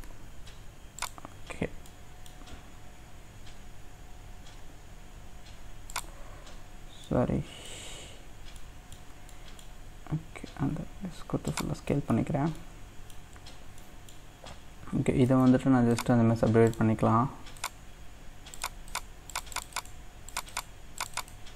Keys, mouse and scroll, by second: 0.1 g, 1.5-1.8 scroll up 1, 1.8 middle click, 2.4-4.6 scroll down 2, 4.6 g, 6.5-7.1 scroll up 1, 7.1 middle click, 7.7-8.6 scroll up 2, 8.6 middle click, 9.2 scroll up 1, 9.3 middle click, 9.8-10.6 scroll down 1, 10.6 s, 11.9 middle click, 12.3-12.6 scroll down 2, 12.6 middle click, 13.2-13.8 scroll up 2, 13.8-15.3 middle drag, 15.9-19.5 right drag, 19.7-21.5 right drag.